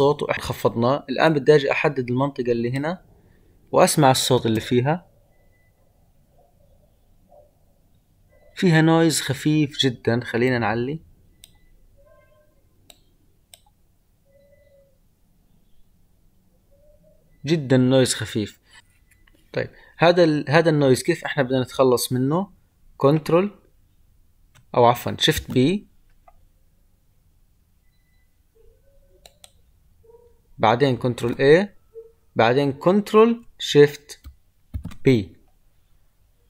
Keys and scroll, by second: 31.1 ctrl+a, 34.6 ctrl+shift+p.